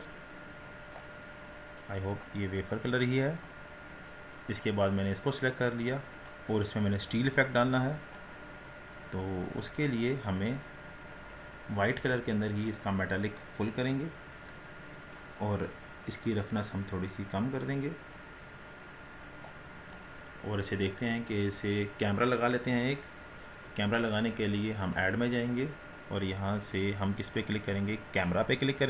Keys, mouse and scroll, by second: 1.8-2.4 middle drag, 2.4-2.7 scroll up 6, 2.9-3.6 middle drag, 3.6-4.7 scroll down 4, 4.7 click, 6.4-9.7 drag, 10.0-11.8 drag, 11.8-12.8 scroll down 9, 12.8-20.2 drag, 20.4-21.1 scroll down 3, 21.1-23.7 scroll up 1.